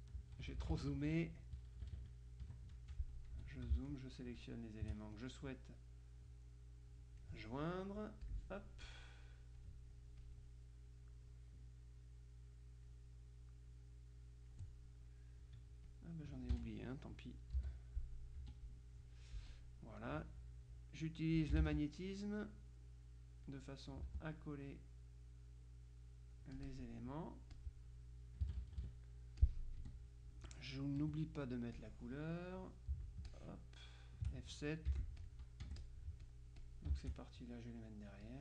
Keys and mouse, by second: 0.3 KP_Subtract, 3.4 F2, 3.9 shift+click, 5.2-7.8 drag, 8.4 click, 9.7 click, 16.0 click, 16.6 F1, 17.6 Delete, 18.5 F2, 19.6 click, 22.5-24.0 drag, 24.7-27.4 drag, 27.6 click, 28.5 KP_Subtract, 29.5 click, 29.9 F1, 31.1 KP_Subtract, 31.8-33.1 drag, 33.4-34.6 shift+drag, 35.0 F7, 35.2-37.6 drag, 35.7 F1, 38.3 click.